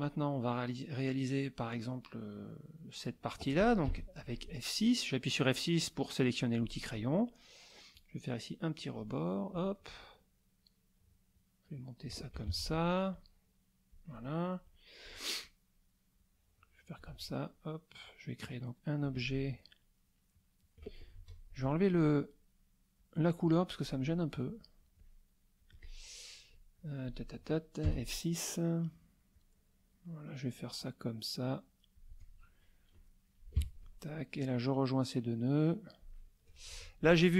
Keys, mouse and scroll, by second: 0.4 middle click, 3.8 F6, 7.9-9.1 drag, 10.0-12.2 shift+drag, 12.5 ctrl+shift+z, 13.1-14.1 shift+drag, 14.5 shift+middle click, 16.1-17.1 shift+drag, 18.0-19.2 shift+drag, 21.2 shift+F2, 21.3 shift+click, 23.0 click, 24.5 click, 25.0-26.1 drag, 27.8 F6, 29.3-32.1 drag, 32.7 shift+click, 33.6 Escape, 34.1-36.2 drag, 36.7 F2.